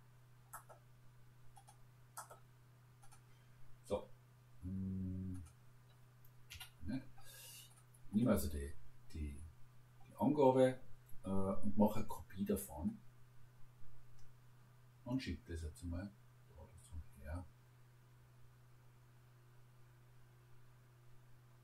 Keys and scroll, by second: 6.5 Delete.